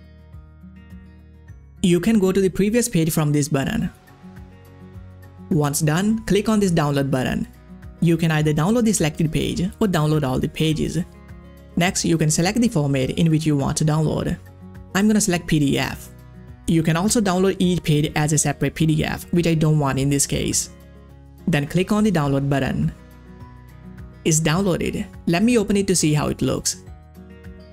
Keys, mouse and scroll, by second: 0.1 click, 0.5 ctrl+scroll down 1, 1.6-2.3 scroll down 1, 3.1 scroll down 1, 3.2 click, 4.5-5.1 ctrl+scroll up 1, 7.1 ctrl+scroll up 1, 7.2 click, 9.2 click, 12.0 click, 15.3 click, 18.9 click, 25.2 middle click, 26.0 middle click, 26.1-27.7 drag.